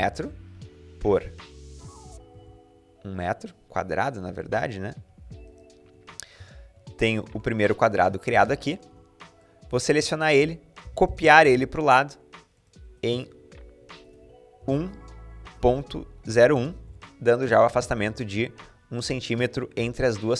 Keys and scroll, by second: 1.9 1, 2.1 Return, 4.1 typing, 5.6 Escape, 8.4 Escape, 8.7 Escape, 8.7 typing, 10.6 typing, 14.1-16.8 typing, 17.5 Escape, 19.4 Escape, 19.9-20.3 typing.